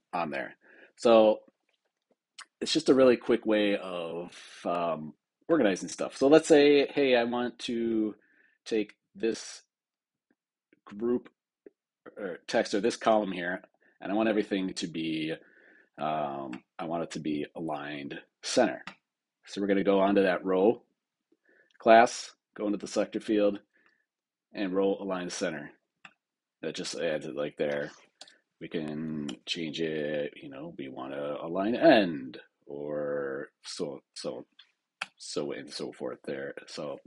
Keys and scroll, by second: 28.1 super+Return.